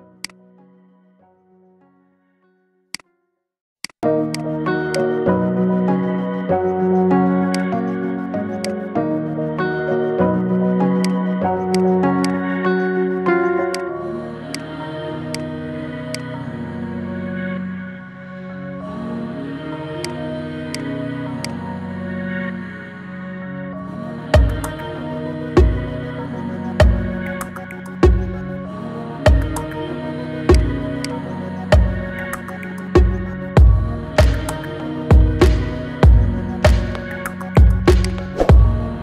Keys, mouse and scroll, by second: 0.0 click, 2.8 click, 3.6 shift+click, 4.1 shift+click, 4.7 shift+click, 6.3 ctrl+j, 7.4 click, 8.4 click, 10.9 click, 11.6 click, 12.0 click, 13.2 shift+d, 14.3 drag, 15.1 click, 15.9 shift+click, 17.2 ctrl+shift+b, 19.9 click, 20.6 click, 21.2 shift+click, 22.3 ctrl+shift+b, 24.1-26.4 middle drag, 26.4 KP_1, 27.7 KP_3, 28.2-30.4 middle drag, 28.2-28.7 scroll up 4, 29.1-29.5 scroll up 3, 30.4 click, 30.9 click, 34.3 ctrl+2, 34.4-35.2 scroll down 3, 35.2-35.7 scroll up 2, 35.7 ctrl+z, 37.2-37.8 scroll down 4, 37.8 click, 38.2 scroll up 3, 38.8 click.